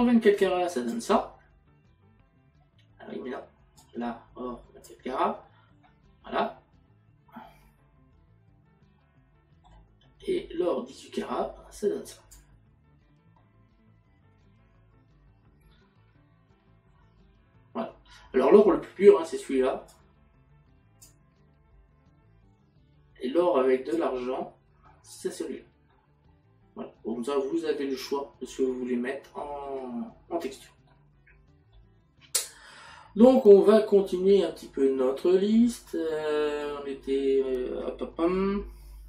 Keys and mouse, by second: 3.8 click, 5.9 middle click, 11.0 click, 13.4 middle click, 24.0 click, 25.9 middle click.